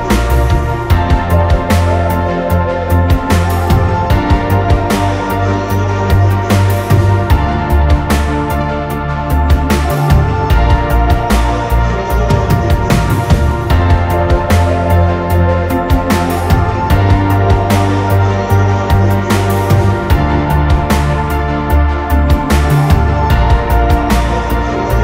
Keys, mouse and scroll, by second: 0.1 typing, 0.2 scroll up 1, 1.2 scroll down 1, 1.3 middle click, 1.6 scroll up 1, 2.8 scroll down 1, 3.1 middle click, 3.6 scroll up 1, 3.8 middle click, 4.2 scroll up 1, 4.4 middle click, 4.6 scroll down 1, 4.8 middle click, 9.0 r, 11.2 double click, 11.4 right click, 12.3 middle click, 14.6 shift+click, 15.1 shift+click, 15.7 shift+click, 16.5 middle click, 18.2 shift+click, 19.2 right click, 20.1 middle click, 21.5 typing, 23.1 Return, 24.5-25.0 typing, 24.7-25.0 scroll up 1.